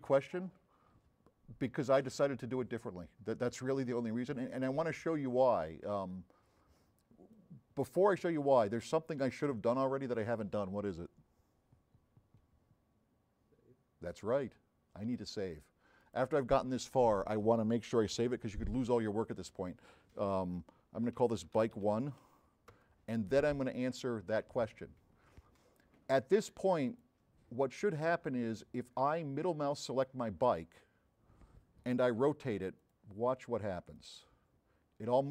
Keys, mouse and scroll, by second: 7.4-9.0 drag, 21.2 b, 22.8 Return, 29.9 middle click, 30.7 middle click, 32.8 click, 34.1-35.3 drag.